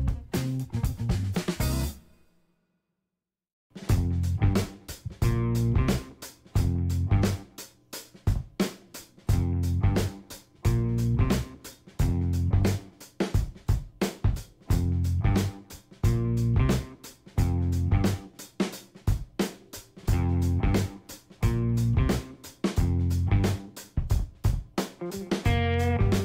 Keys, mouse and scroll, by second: 2.9 click, 3.9 ctrl+click, 4.9 g, 5.8 click, 7.1 shift+d, 11.0 click, 11.3 scroll down 2, 11.6 middle click, 12.1 shift+d, 14.8 click, 16.4-19.0 drag, 21.4 click, 22.0 ctrl+click, 23.2 click, 23.9 shift+click, 24.5 shift+click, 25.2 shift+click.